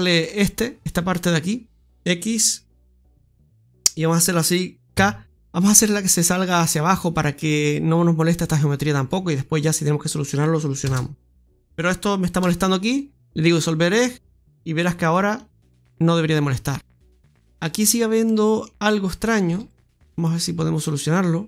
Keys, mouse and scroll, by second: 0.8 right click, 4.8 k, 11.2 right click, 12.3 right click, 12.5 x, 15.0 click, 15.3 click, 15.9-16.4 scroll down 1, 16.4 middle click, 16.4-17.1 scroll down 1, 17.1 scroll up 1, 17.5 shift+middle click, 17.9 scroll up 1, 18.2 middle click, 19.0 right click, 19.4 alt+shift+right click, 20.0 click, 21.0 click.